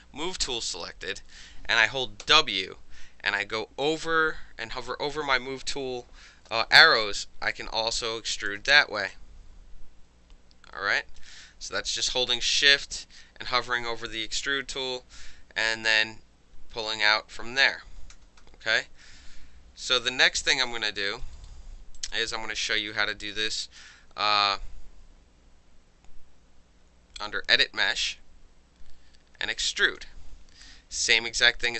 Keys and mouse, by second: 7.0-8.5 shift+drag, 8.8 alt+right drag, 9.1-11.2 alt+drag, 11.2-12.6 alt+middle drag, 13.0-16.0 shift+middle drag, 16.0-16.8 shift+drag, 17.0-17.7 alt+drag, 17.8 ctrl+z, 18.1 ctrl+z, 18.4 ctrl+z, 19.7 ctrl+y, 20.5 alt+drag, 21.0 alt+middle click, 21.1 alt+right click, 22.0 alt+click, 27.2 click, 29.9 click.